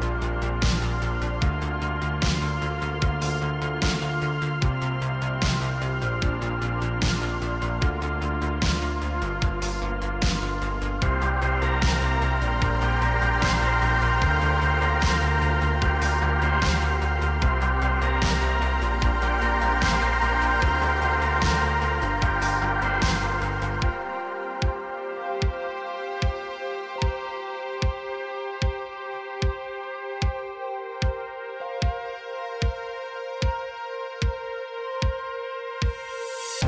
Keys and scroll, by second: 1.7 Tab, 2.1 Tab, 6.8 h, 8.8 Tab, 10.0 Tab, 10.9 ctrl+Tab, 18.0 Tab, 31.9 Tab, 33.6 Tab, 34.7 shift+s, 35.5 3, 36.3 shift+s.